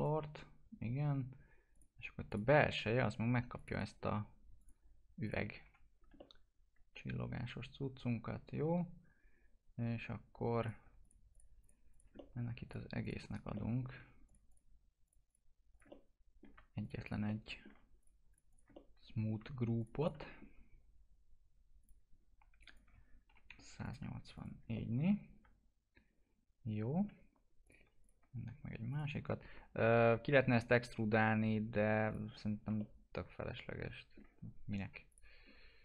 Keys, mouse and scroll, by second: 3.7 right click, 4.5 click, 5.6 F4, 5.8 scroll down 1, 6.1 alt+middle click, 10.8 click, 12.1 alt+middle click, 12.6 ctrl+click, 13.9 alt+middle click, 14.2 ctrl+click, 16.2 alt+middle click, 16.8 ctrl+click, 17.2 alt+middle click, 18.0 ctrl+click, 18.7 alt+middle click, 19.7 ctrl+click, 22.8 1, 23.8 click, 24.7-27.3 alt+middle drag, 27.3 scroll up 1, 27.6 click, 28.9 click, 31.6-32.0 scroll down 1, 32.0 click, 32.7-35.0 alt+middle drag, 35.0 click, 35.4 scroll down 1.